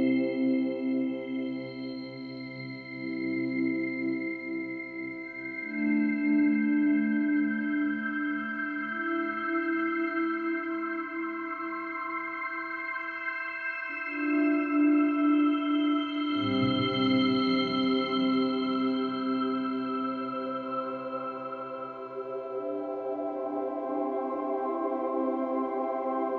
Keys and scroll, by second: 23.6 space.